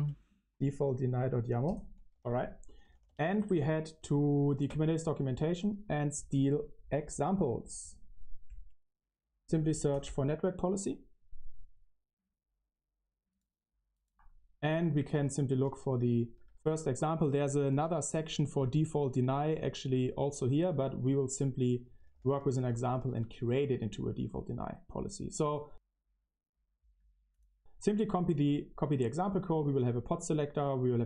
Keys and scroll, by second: 0.0-6.2 typing, 4.6 Return, 14.5-18.5 typing, 18.5 Return, 21.5-24.3 typing.